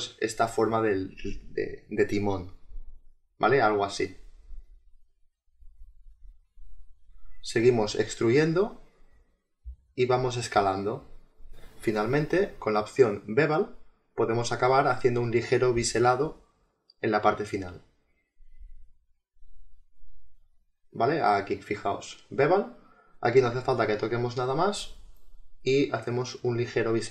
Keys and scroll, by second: 9.0 space, 19.9 ctrl+z.